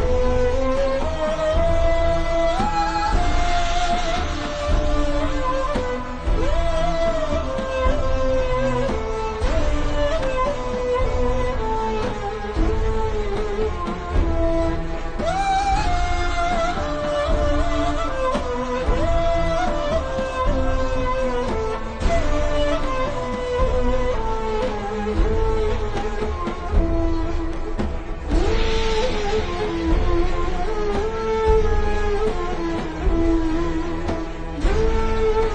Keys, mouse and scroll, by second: 0.3 alt+o, 0.5-1.2 typing, 1.3 KP_Enter, 2.0 click, 3.2-4.7 scroll up 1, 5.1 click, 7.2 a, 7.4 click, 8.5 v, 9.1 click, 10.6-11.0 alt+shift+scroll up 2, 11.0 click, 12.2-13.3 scroll up 1, 13.3 i, 13.5 click, 14.3 v, 14.5 click, 15.4-17.2 alt+shift+scroll down 2, 18.0 click, 18.7-19.1 alt+shift+scroll down 2, 19.4 alt+shift+scroll up 1, 19.8 click, 20.2 alt+shift+scroll up 2, 20.4 click, 20.8 click, 21.8 alt+shift+scroll down 1, 22.6 click, 24.3-24.7 scroll down 1, 24.7 click, 27.6 click, 28.3-28.8 alt+shift+scroll down 3, 29.4 scroll down 1, 29.6 click, 30.1-30.6 alt+shift+scroll down 3, 32.1 click, 32.6-33.3 scroll down 1, 33.3 click, 35.2 alt+shift+scroll up 1.